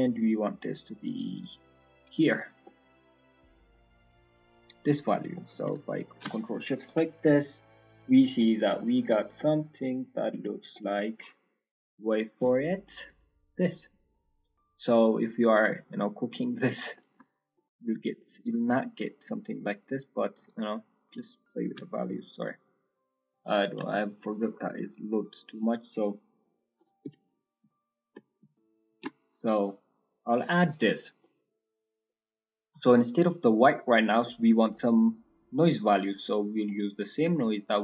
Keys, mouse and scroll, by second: 2.3 scroll down 5, 2.6 middle click, 3.3-3.9 scroll down 3, 3.6 middle click, 3.9-4.3 scroll up 5, 4.5 middle click, 5.3 middle click, 6.1 ctrl+shift+click, 7.0-7.9 scroll down 2, 7.9 click, 8.5-9.0 scroll down 2, 8.7 middle click, 9.3 middle click, 10.7 middle click, 11.0-11.6 scroll up 2, 13.6 middle click, 14.0-14.9 scroll up 3, 14.4 middle click, 15.2-16.2 scroll up 4, 15.5 middle click, 16.3 middle click, 16.9 middle click, 17.2 scroll down 4, 17.5 middle click, 17.8 scroll up 2, 18.1 middle click, 18.9 click, 25.5-26.4 scroll down 10, 26.4-26.9 scroll down 6, 26.7 middle click, 26.7-28.0 scroll up 9, 29.0 ctrl+z, 30.5-31.2 scroll down 5, 31.2 middle click, 31.7-32.0 scroll up 4, 32.0 middle click, 33.5 scroll down 1, 33.8 middle click, 34.2 middle click, 34.4 scroll down 2, 34.6 middle click, 35.5-36.5 scroll down 4, 35.8 click, 37.5 g.